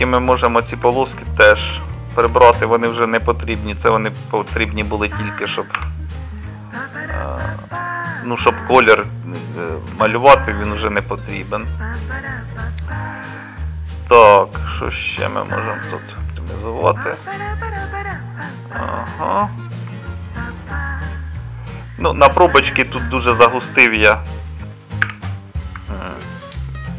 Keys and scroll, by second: 5.8 x, 25.1 1.